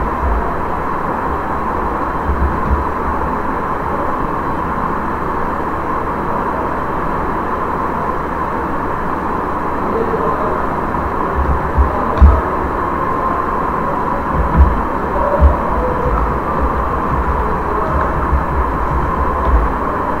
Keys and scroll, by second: 0.1 ctrl+v, 0.5 ctrl+a, 1.9-2.8 typing, 11.1-11.9 typing, 12.1 Return, 15.1-19.9 typing.